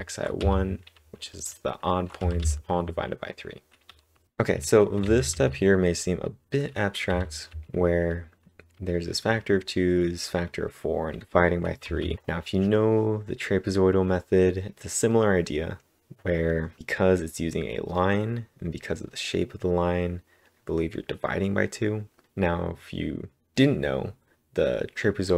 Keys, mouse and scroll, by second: 5.0 typing, 11.8 typing.